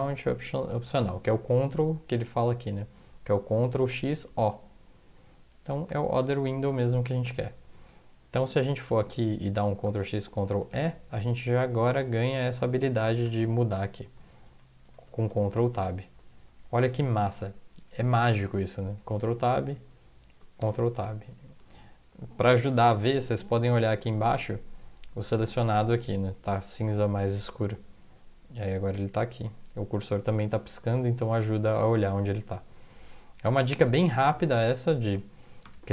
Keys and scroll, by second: 8.5 Right, 9.8 ctrl+x, 10.6 ctrl+e, 13.2 ctrl+\, 14.4 ctrl+Tab, 14.8 ctrl+Tab, 15.1 ctrl+Tab, 15.3 ctrl+Tab, 15.6 ctrl+Tab, 19.0 ctrl+Tab, 20.6 ctrl+Tab, 27.3 ctrl+Tab, 30.3 ctrl+Tab, 33.0 ctrl+Tab, 34.6 ctrl+Tab, 35.6 ctrl+\.